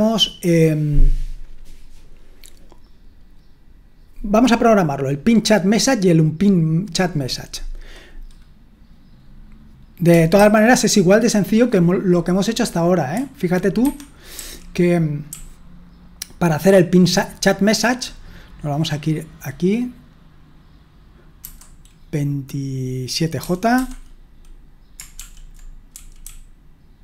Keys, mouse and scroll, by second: 10.4 super+1, 13.8 Escape, 14.4-18.0 typing, 21.4 typing, 23.5-27.0 typing.